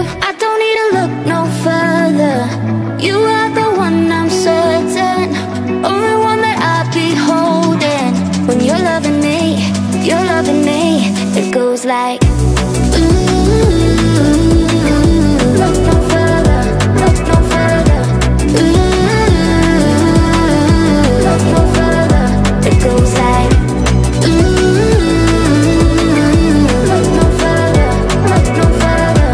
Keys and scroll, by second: 11.4 Down, 13.4 Up.